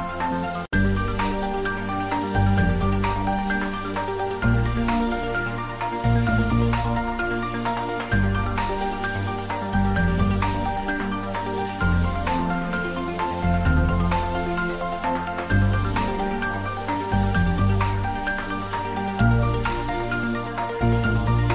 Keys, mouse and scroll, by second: 0.2 ctrl+middle click, 0.7 middle click, 1.2 ctrl+middle click, 1.7-3.6 shift+middle drag, 3.8-8.0 middle drag, 8.0 ctrl+s, 8.5-21.5 shift+middle drag.